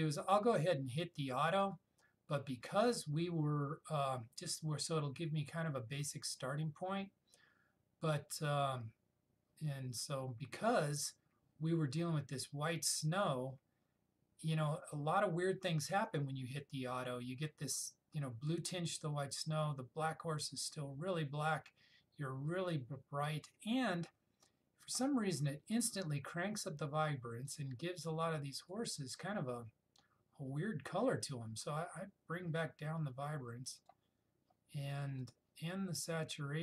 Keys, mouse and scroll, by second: 1.7 click, 1.8 click, 27.6-28.9 drag.